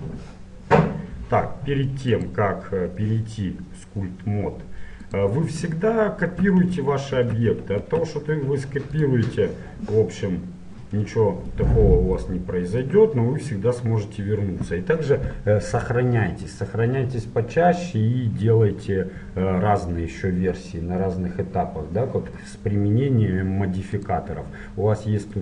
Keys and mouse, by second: 2.2-4.0 drag, 5.8 middle click, 7.8 shift+d, 10.3-25.4 drag.